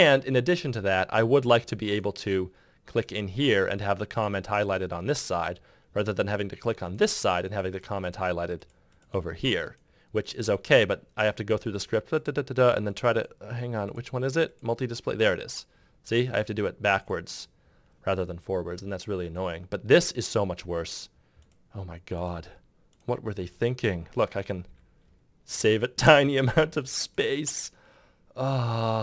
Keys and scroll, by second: 24.4 Delete.